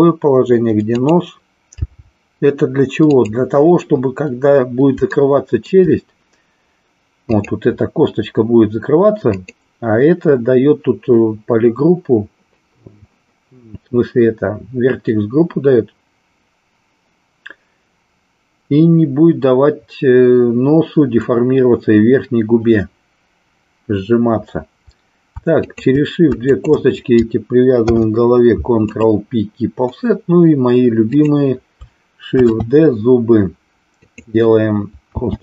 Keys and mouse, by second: 1.0 click, 1.7 g, 5.1 shift+middle click, 7.2 click, 9.2 click, 25.5 shift+click, 26.5 shift+click, 27.7 ctrl+p, 31.1 click, 32.5 shift+d, 35.1 s.